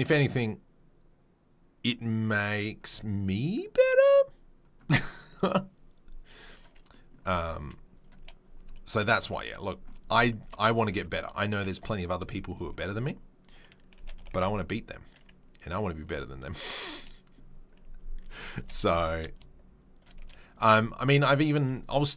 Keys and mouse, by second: 5.8-6.6 right drag, 6.6-22.1 middle drag, 7.3 s, 9.0 KP_3, 9.3 KP_1, 10.9 s, 13.9 g, 16.0 s, 18.6 g, 20.2 z.